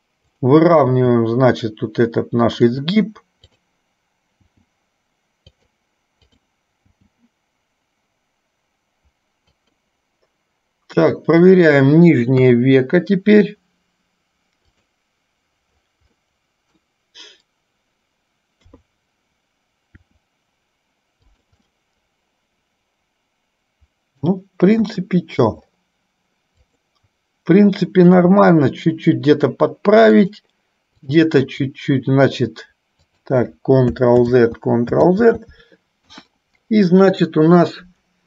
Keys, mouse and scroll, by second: 0.6 click, 1.3 g, 3.6 click, 4.8 g, 6.5 click, 7.1 g, 11.5 click, 12.6 KP_3, 16.4 middle click, 18.8 KP_3, 20.1 r, 21.9-24.5 middle drag, 25.1 KP_1, 26.9 click, 31.3 click, 34.6 ctrl+z, 36.5 KP_1.